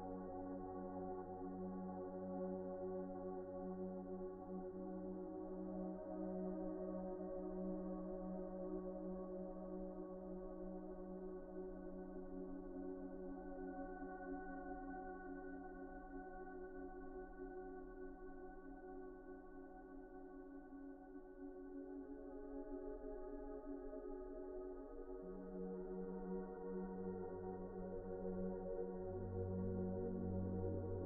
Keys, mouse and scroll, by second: 3.8 middle click, 6.0 middle click, 10.4 scroll down 1, 10.6 middle click, 11.4 Tab, 12.5 Tab, 13.0-13.4 scroll up 1, 13.6-14.1 scroll down 1, 14.9 middle click, 15.8 scroll down 1, 16.0 middle click, 17.2 shift+middle click, 19.4 middle click, 19.7 scroll up 1, 20.0 shift+middle click, 22.7-23.7 scroll up 1, 25.6 middle click, 26.4 alt+shift+click, 27.0 alt+shift+click, 27.5 middle click, 27.9 alt+a, 28.1 middle click, 29.7 alt+shift+click, 30.4 alt+shift+click, 30.8 middle click.